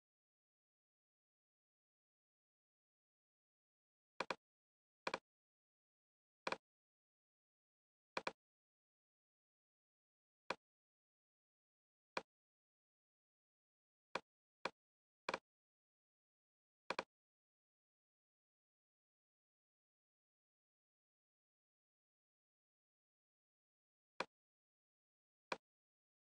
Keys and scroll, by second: 17.9-20.4 typing.